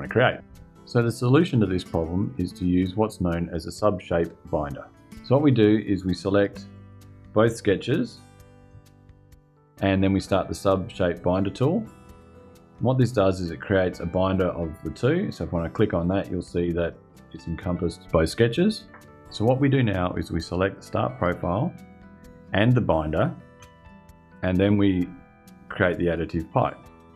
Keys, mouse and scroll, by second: 6.4 click, 7.8 ctrl+click, 11.5 click, 15.8 click, 20.8 click, 22.9 ctrl+click, 26.4 click.